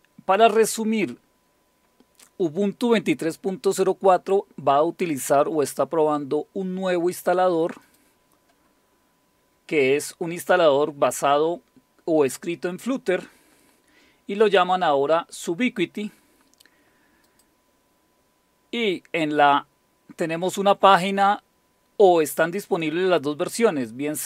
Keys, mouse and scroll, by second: 7.8 click, 8.8-10.2 scroll down 3, 17.3 click, 18.1 click.